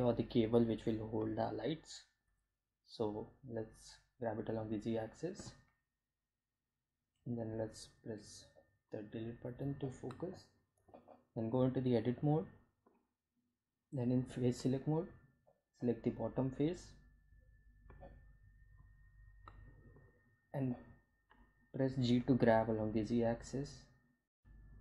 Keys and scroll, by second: 1.7 g, 1.9 z, 4.8 g, 5.9 z, 6.7 Delete, 10.0 Tab, 13.2 3, 20.6 g, 20.9 z, 24.4 Tab.